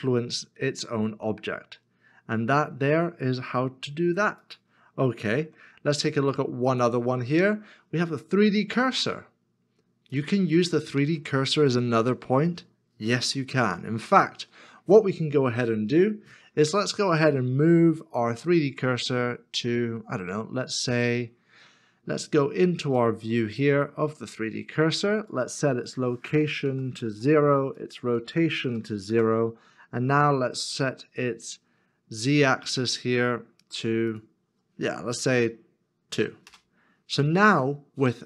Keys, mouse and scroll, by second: 5.2 x, 5.2 ctrl+z, 13.8 shift+middle click, 26.7 KP_0, 27.0 Return, 28.7 KP_0, 29.1 Return, 36.1 Return.